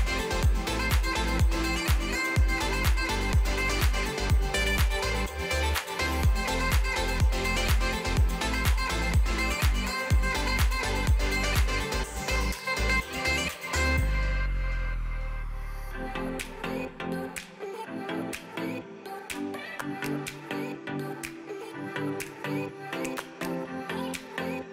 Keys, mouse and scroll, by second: 0.8 click, 8.2 l, 8.6 g, 12.9 click, 13.6 l, 14.0 g, 15.5 Left, 16.8 l, 17.8 r, 19.1 g, 20.2 Left, 20.7 l, 21.1 g, 22.3 Left, 22.7 Left, 23.4 Left.